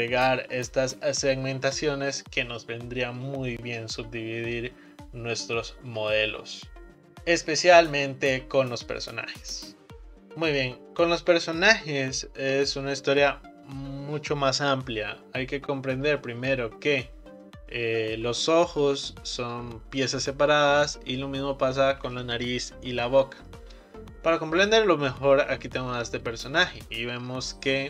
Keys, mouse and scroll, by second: 10.1-12.1 scroll up 1, 25.0-27.8 scroll up 2.